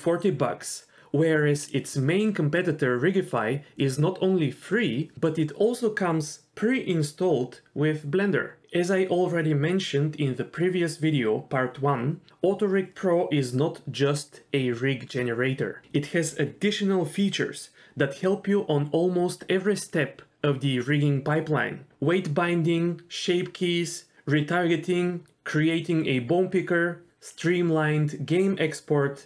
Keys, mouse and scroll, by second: 3.5 click, 3.9 KP_1, 4.4 scroll up 2, 4.6-5.0 scroll down 3, 7.0-7.9 scroll up 2, 10.2 g, 16.6 g, 17.7 g, 18.9 click, 19.0 g, 23.6 click, 24.2 click, 24.7 l, 28.3 g.